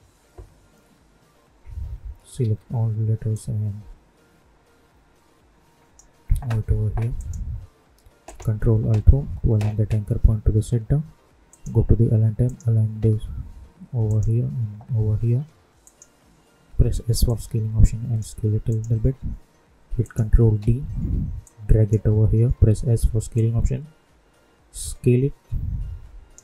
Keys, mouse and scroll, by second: 2.3 ctrl+a, 3.3-7.1 drag, 9.4 ctrl+alt+Home, 11.4 click, 16.6 s, 17.5 click, 20.5 ctrl+d, 21.4 click, 22.5 s, 23.3-26.4 drag.